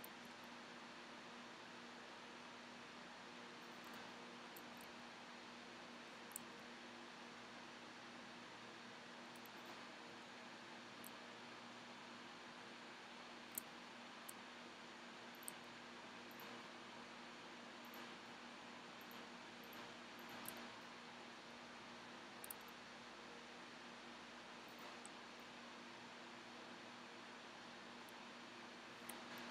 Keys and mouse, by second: 0.2-3.9 middle drag, 0.5 g, 4.0-6.7 drag, 5.1 z, 6.6 g, 9.9 click, 10.4 click, 10.4 z, 10.8 right click, 11.4 click, 12.0-16.2 middle drag, 15.6-17.0 right drag, 17.0-21.5 middle drag, 21.5-22.8 right drag, 21.7 z, 22.7 g, 25.3 middle click, 26.0 middle click, 26.5 middle click, 28.1 middle click, 29.3 middle click.